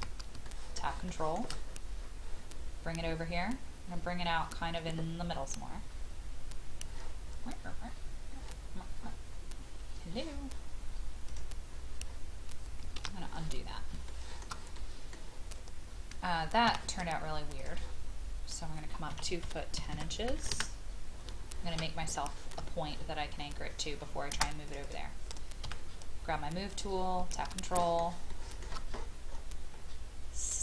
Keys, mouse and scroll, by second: 0.5 shift+middle click, 1.1 shift+middle click, 1.6-2.0 scroll up 1, 7.5-8.2 scroll down 1, 11.2 click, 11.7-12.3 scroll up 1, 12.9 ctrl+z, 13.6 scroll up 1, 14.1 shift+middle click, 14.7 middle click, 16.7 t, 17.6 click, 19.1 KP_2, 19.7 KP_1, 19.9 KP_0, 20.5 Return, 21.2-21.6 scroll down 1, 22.1 shift+middle click, 22.5-22.9 scroll down 1, 23.3-24.4 scroll up 1, 24.7 click, 25.6 m, 26.7 click, 27.6 shift+middle click, 28.3 shift+middle click, 28.9-30.6 scroll up 1.